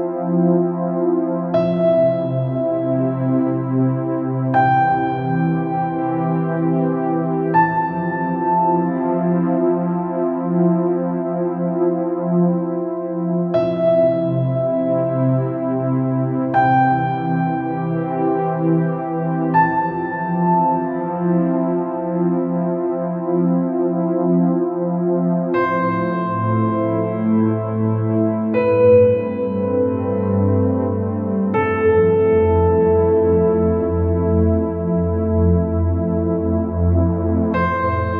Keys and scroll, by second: 6.8-7.3 space, 26.6 ctrl+z, 30.8-31.4 space.